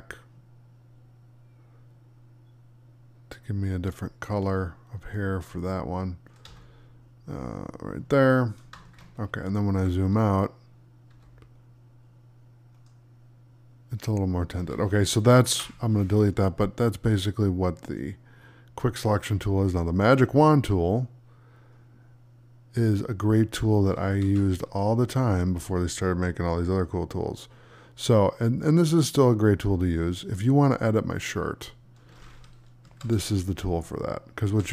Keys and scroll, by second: 15.4 Delete, 24.1 ctrl+d, 32.7 Delete, 34.4 Delete.